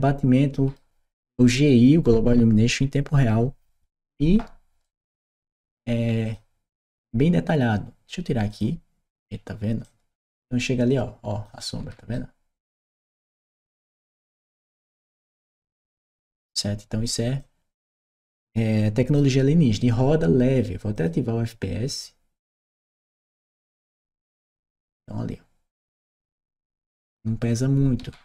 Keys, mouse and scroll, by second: 4.6 right click, 6.6 click, 8.3 click, 9.7-11.3 drag, 11.4 right click, 13.6-15.4 drag, 15.6 right click, 17.2-19.0 drag, 20.8 click, 23.3 click, 26.4-28.2 right drag.